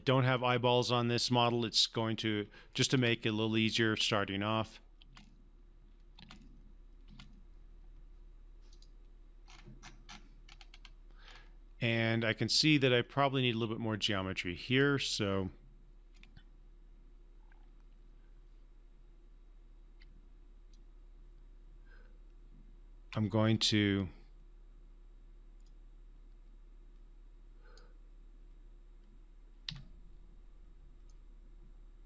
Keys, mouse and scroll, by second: 3.0 space, 4.9 space, 8.7 click, 9.4 scroll up 1, 14.6 click, 16.1 x, 20.0-23.0 typing, 20.7 click, 25.7-27.8 drag, 29.7 Escape, 31.0 right click, 31.1-32.0 right drag.